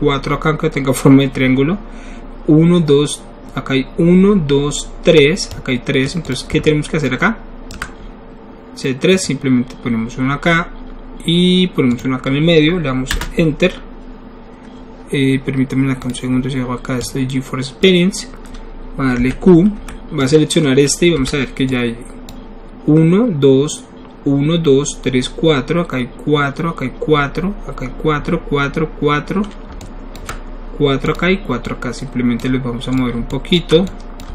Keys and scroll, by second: 13.2 Return, 19.3 q, 19.8 e, 21.1 w.